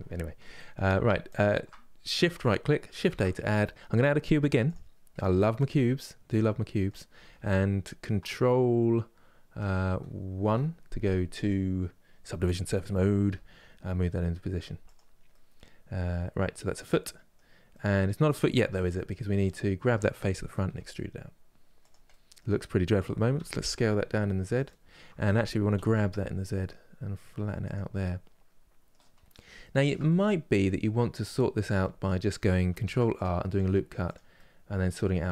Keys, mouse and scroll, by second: 1.0-4.4 shift+right drag, 4.4 shift+a, 4.8-10.1 middle drag, 10.1 ctrl+1, 12.9 g, 15.0-18.3 middle drag, 18.3 Tab, 18.6 middle click, 19.2 click, 20.3 e, 21.8-23.1 middle drag, 23.1 s, 27.7-28.8 middle drag, 28.8 scroll up 2, 29.3-31.1 shift+middle drag, 31.1-31.5 scroll up 1, 31.5-32.5 middle drag, 32.5 ctrl+r, 34.1-35.3 middle drag.